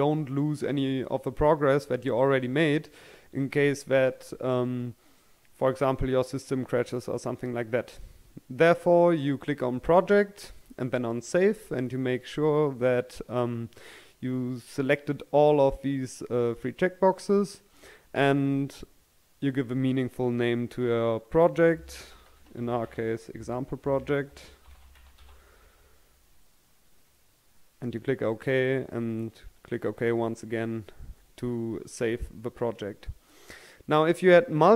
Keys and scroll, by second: 21.9-25.1 typing.